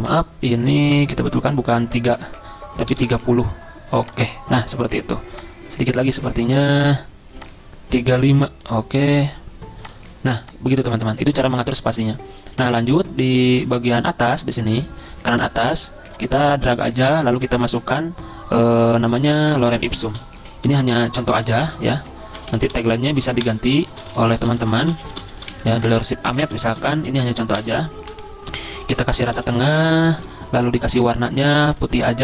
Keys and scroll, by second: 0.0-0.7 typing, 2.7-3.5 typing, 4.6-5.3 typing, 8.7-9.6 typing, 11.8-12.5 typing, 17.6 ctrl+a, 19.4-27.2 typing, 23.4 Return, 27.5 Return, 28.8 ctrl+a, 29.1-30.6 typing.